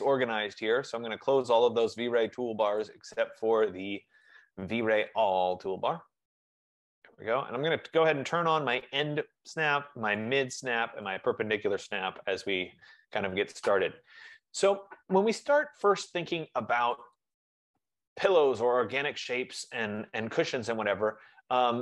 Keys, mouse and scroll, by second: 0.9 click, 2.1 click, 4.6 F15, 4.6 click, 7.7 click, 8.9 click, 10.4 click, 11.2 click, 17.0 click, 17.8 click.